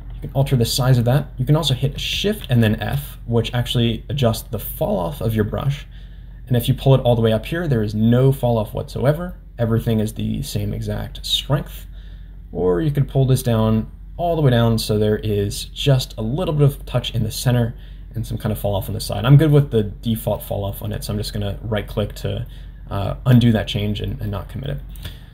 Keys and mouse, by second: 0.2 middle click, 2.1 shift+f, 20.4 middle click, 23.5 shift+middle click, 24.7 shift+middle click.